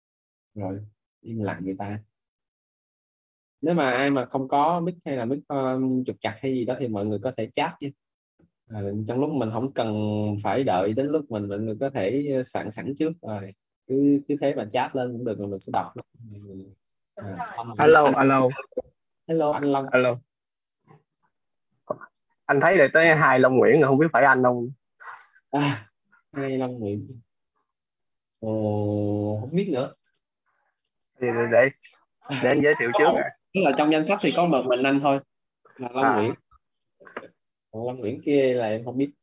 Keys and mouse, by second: 7.5 click, 21.2 click, 37.1 click.